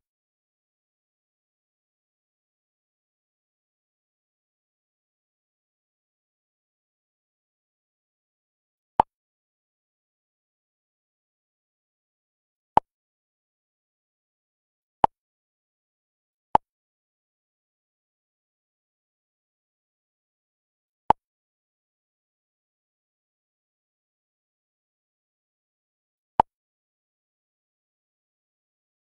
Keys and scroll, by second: 6.5 ctrl+a.